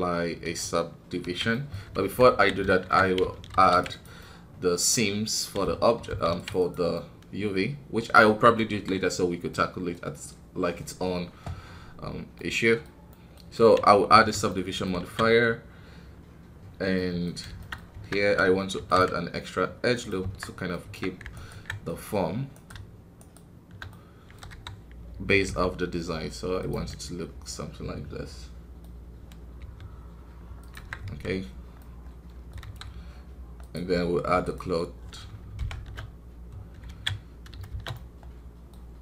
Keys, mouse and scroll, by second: 1.8 scroll up 2, 1.9 Tab, 4.1-6.0 middle drag, 6.0 ctrl+r, 6.9-8.2 middle drag, 8.2 Tab, 8.6 KP_1, 9.1-9.5 scroll down 1, 9.5-14.1 middle drag, 14.1 ctrl+d, 14.4 middle click, 14.9 alt+a, 16.9 middle click, 17.7 scroll up 2, 17.9 Tab, 20.4-24.5 middle drag, 24.5 KP_3, 25.4 g, 26.8-29.5 middle drag, 29.5 g, 31.0 KP_1, 31.4 scroll down 1, 31.7 middle click, 32.6 KP_1, 33.6-35.5 drag, 35.5 shift+Left, 35.7 shift+space, 36.9 alt+a, 37.1 scroll down 2, 37.7 shift+space, 37.9-39.0 middle drag.